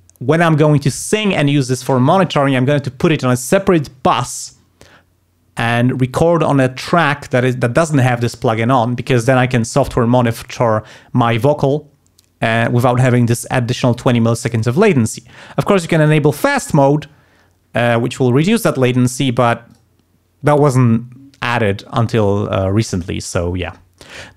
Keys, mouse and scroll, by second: 16.0 click, 19.7 click.